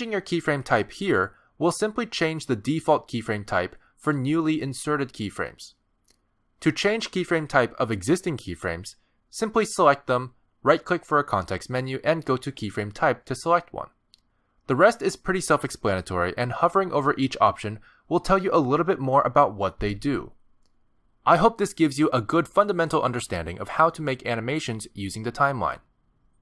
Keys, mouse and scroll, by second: 4.0 click, 5.1 g, 5.6 click, 6.5 click, 8.3 click, 10.3 click, 11.7 right click, 17.1 click.